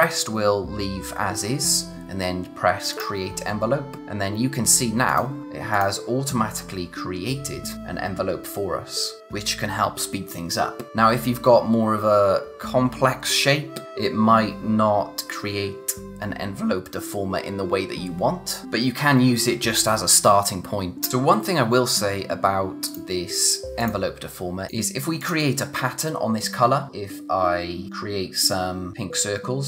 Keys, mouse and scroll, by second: 2.9 click, 5.1 click, 21.1 click, 22.9 click, 27.9 click.